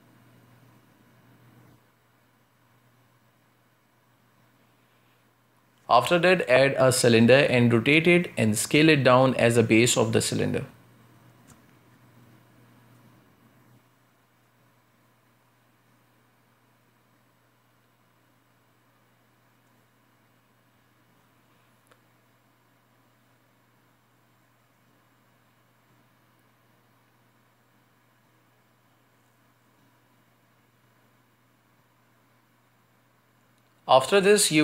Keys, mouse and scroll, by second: 4.4 scroll down 1, 4.7-6.9 middle drag, 6.9-8.4 scroll up 5, 7.2-7.6 shift+middle drag, 7.9 Tab, 9.3 shift+s, 10.9 shift+a, 11.4-11.8 scroll down 4, 11.9 r, 15.9 z, 16.3 s, 17.6-18.5 scroll up 6, 18.8 s, 19.5-20.1 scroll down 3, 20.1 scroll up 1, 20.5 s, 21.6 s, 24.6 s, 31.0 scroll down 2, 31.1 Tab, 31.6 shift+`, 32.9 a, 33.1 a, 33.9 right click.